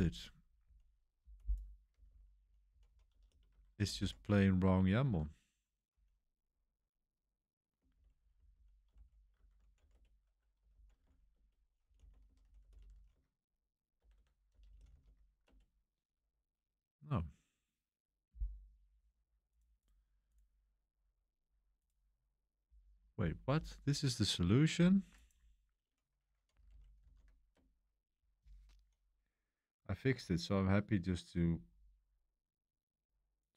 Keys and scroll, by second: 0.0-3.9 typing, 5.0 Escape, 5.0-6.3 typing, 7.6-15.5 typing, 26.2-28.8 typing, 31.3-32.8 typing.